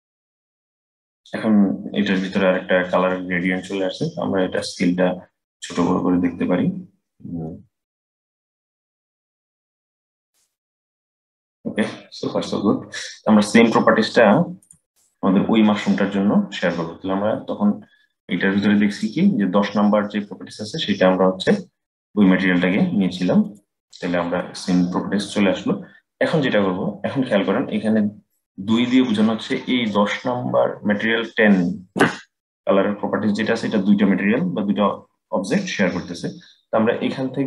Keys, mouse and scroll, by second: 4.3-7.3 drag, 11.8-14.3 scroll down 1, 14.3 click, 18.6 click.